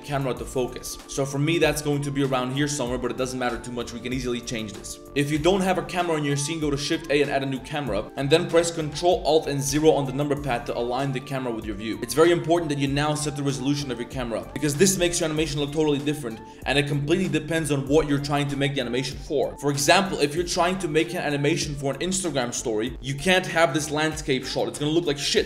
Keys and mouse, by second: 0.6 click, 1.1 drag, 2.7 click, 5.1 click, 5.3 shift+a, 8.0 shift+click, 8.1 middle click, 9.7 ctrl+alt+KP_0, 10.8 shift+click, 11.6 click, 20.4 click.